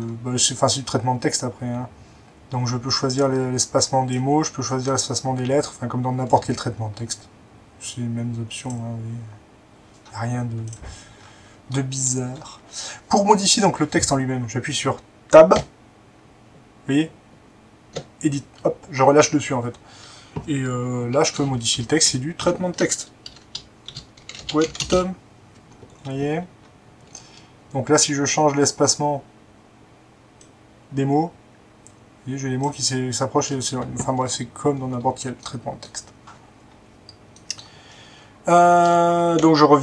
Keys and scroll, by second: 15.6 Tab, 16.0 Tab, 21.5 BackSpace, 21.7 BackSpace, 22.0 BackSpace, 22.4 BackSpace, 23.8-24.9 typing, 39.3 2.